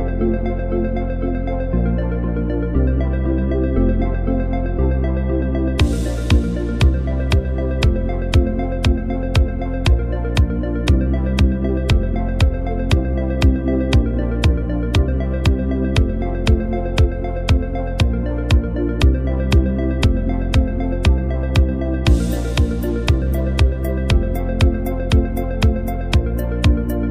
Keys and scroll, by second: 2.7 v, 8.3 space, 9.4 z, 10.4-11.3 typing, 13.0 space, 18.2 v, 20.5-21.0 typing, 23.4 super+0, 24.6 super+-, 24.7 super+-, 25.4 space, 25.9 z, 26.6 v.